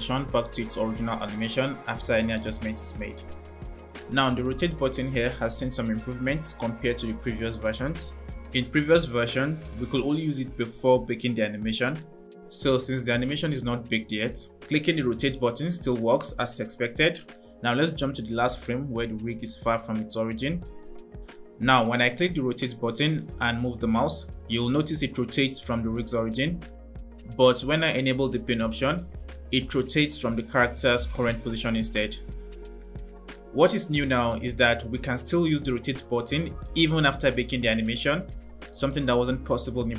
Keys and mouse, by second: 14.7 drag, 16.8 click, 18.5 click, 27.3 click, 27.9 click, 37.3 click.